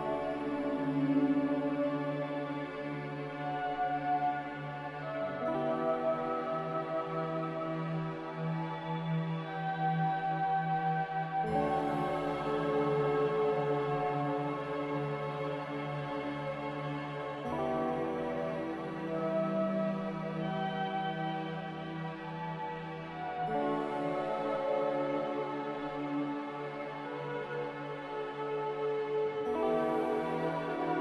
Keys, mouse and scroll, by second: 0.4 r, 2.8 a, 5.0 ctrl+c, 5.1 ctrl+v, 6.7-8.2 typing, 8.8 ctrl+v, 10.0-10.8 typing, 11.9 typing, 18.4 ctrl+v, 19.9 ctrl+c, 20.0 ctrl+v, 21.4 ctrl+c, 21.5 ctrl+v, 22.4-23.1 typing, 26.5 Return, 26.5 typing, 28.3 Return, 30.2 2, 30.4 Return.